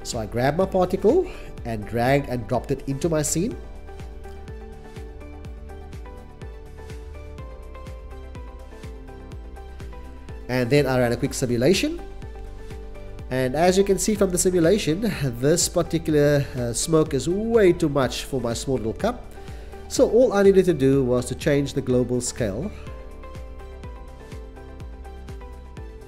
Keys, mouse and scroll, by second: 10.7 shift+s, 14.8 drag, 15.9 0, 16.0 ,, 16.2 2, 16.3 Return, 20.9 0, 21.0 ,, 21.0 1, 21.1 Return, 22.9 c, 23.1 c.